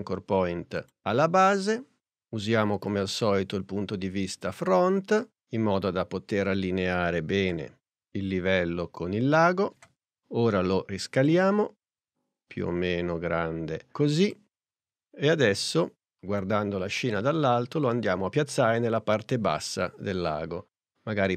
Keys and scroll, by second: 7.4 p, 10.2 s.